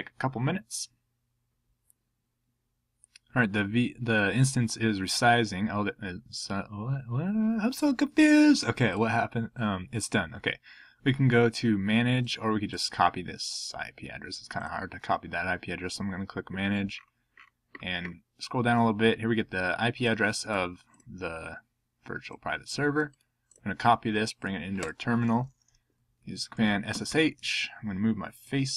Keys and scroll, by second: 26.4-27.6 typing.